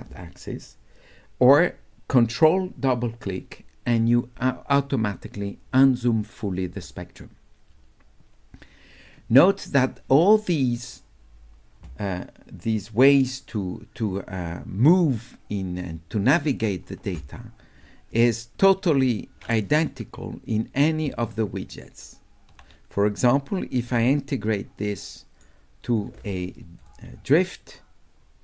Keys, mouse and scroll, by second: 13.4-16.6 drag, 21.3 shift+click, 21.5 shift+right click, 23.9 d, 24.1-25.4 right drag, 26.8 click.